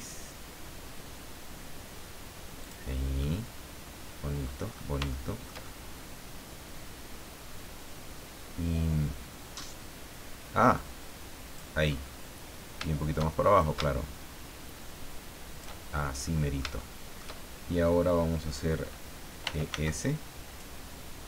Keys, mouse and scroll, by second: 2.6 click, 3.2-4.6 middle drag, 4.7 scroll up 1, 5.1-9.7 shift+middle drag, 10.7 click, 11.8 scroll up 2, 13.6-15.8 shift+drag, 16.2-17.3 middle drag, 19.4 e, 19.7 s.